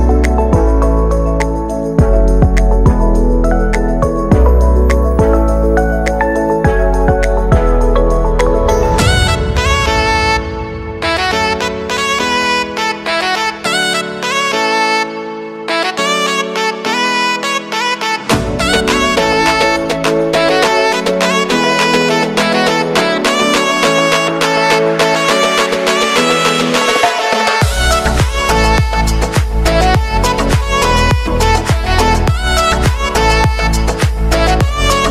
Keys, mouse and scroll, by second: 1.3 ctrl+d, 1.8 click, 5.0 Return, 6.0-8.3 typing, 9.4 click, 10.8 ctrl+shift+c, 11.2-12.4 typing, 12.5 Return, 13.7 click, 20.1 space, 22.2 space, 24.4-30.8 drag, 30.8 space, 34.3 click, 34.9 space.